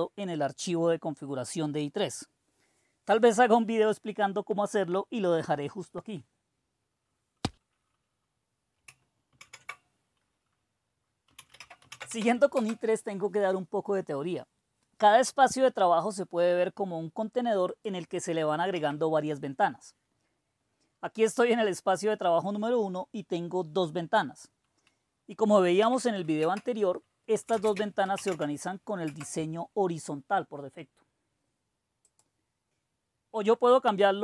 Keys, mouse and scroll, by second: 9.3 super+d, 11.0-12.5 typing, 14.0-14.8 typing, 17.7-21.4 drag, 18.7 typing, 25.7 i, 27.4-29.4 typing, 29.0 Return, 32.1 click, 32.6-34.2 drag.